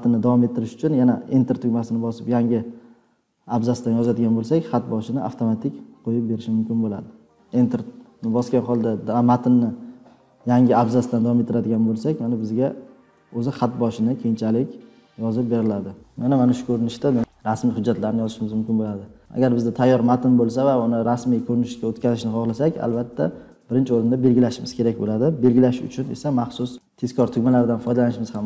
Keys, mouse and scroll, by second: 3.9 Return, 7.3 Return, 12.2-15.5 typing, 19.2 scroll down 11, 20.4-20.9 scroll, 27.8 click, 28.3 click.